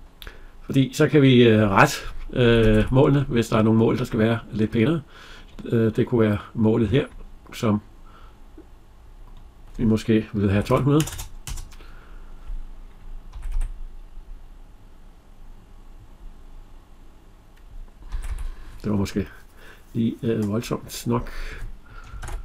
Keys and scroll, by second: 2.4 Escape, 11.2 Return, 13.1 Escape, 22.2 ctrl+z.